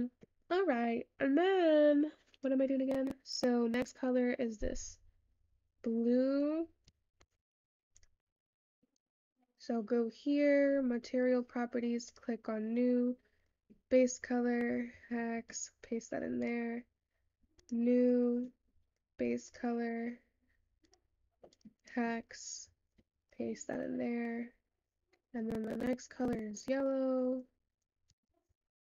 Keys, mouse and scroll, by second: 16.0 click, 18.2 click.